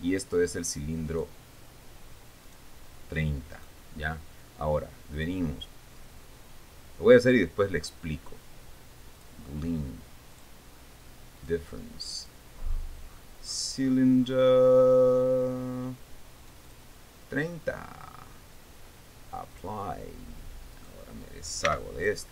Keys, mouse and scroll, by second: 1.6 right click, 3.0 right click, 4.1 right click, 5.7 click, 9.7 click, 10.9 click, 12.0 click, 12.8 click, 13.3-14.7 scroll down 3, 14.8 scroll down 1, 15.1 middle click, 15.5-16.3 scroll down 4, 17.2 click, 20.1 click, 21.3 right click, 22.2 x.